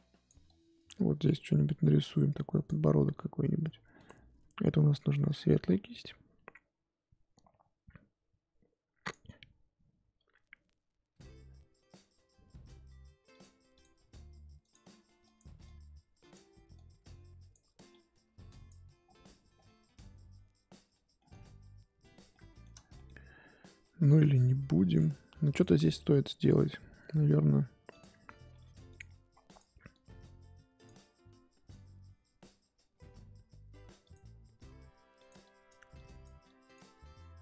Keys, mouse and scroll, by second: 5.2-13.5 drag, 14.6-19.0 drag, 19.0-19.5 scroll down 3, 19.5 scroll down 3, 19.6-20.8 middle drag, 20.8-22.3 scroll up 5, 21.1 middle click, 22.3 middle click, 23.1-23.5 scroll up 2, 23.5-24.0 scroll down 2, 24.0-25.7 drag, 25.7-26.9 scroll up 2, 28.0 click, 28.4 f, 29.4-34.1 drag, 35.1-37.4 drag.